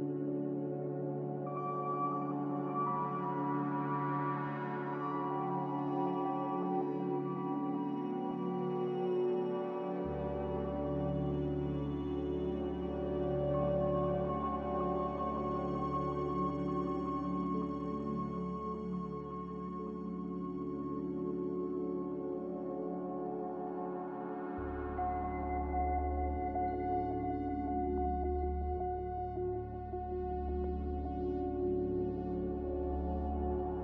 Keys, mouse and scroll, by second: 1.7 0, 1.9 Return, 6.3 a, 27.0 z.